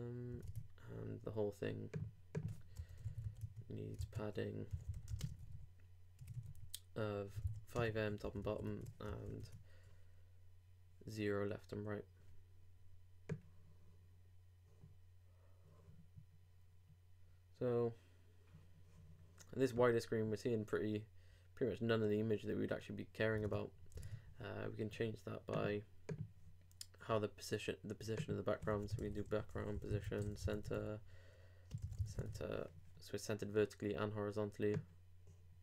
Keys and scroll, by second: 0.4 super+Tab, 4.0 super+Tab, 4.7 super+i, 5.1 shift+g, 5.2 shift+space, 5.4 shift+5, 8.4 super+;, 8.6 super+Tab, 9.2 super+r, 23.4 super+Tab.